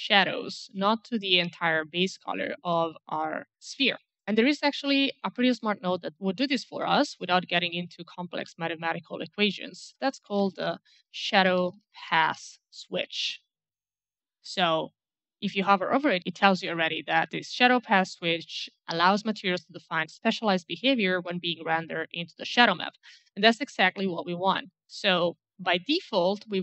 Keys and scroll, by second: 10.1-12.6 typing, 25.5 1.